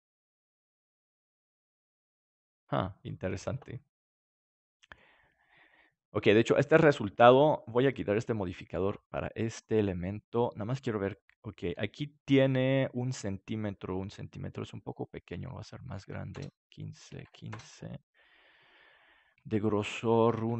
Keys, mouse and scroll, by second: 4.0-6.0 middle drag, 8.0-11.4 drag, 11.4 middle click, 11.6 KP_7, 15.5-18.7 drag, 19.9-20.5 drag.